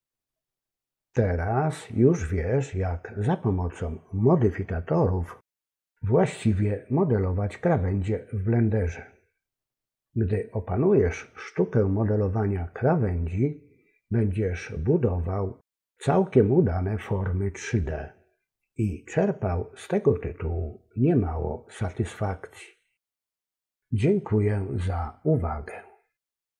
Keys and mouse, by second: 7.1 F10.